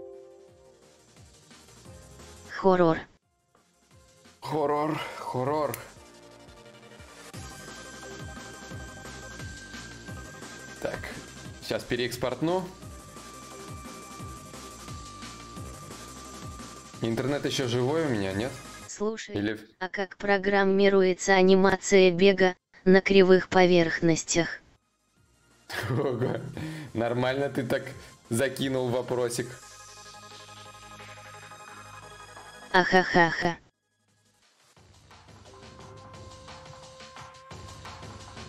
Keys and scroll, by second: 7.3 alt+Tab, 9.7 alt+Tab.